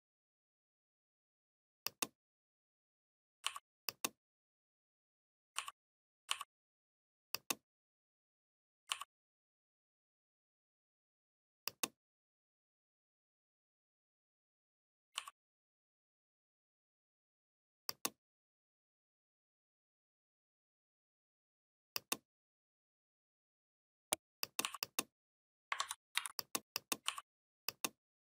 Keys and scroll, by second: 25.6 ctrl+z, 26.0 ctrl+v.